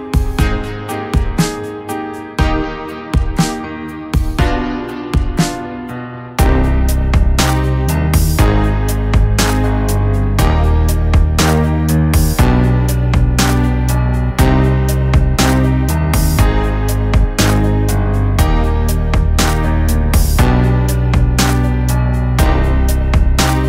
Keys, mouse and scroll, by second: 1.6-5.6 drag, 12.2-12.9 drag, 18.9 click, 21.1 click.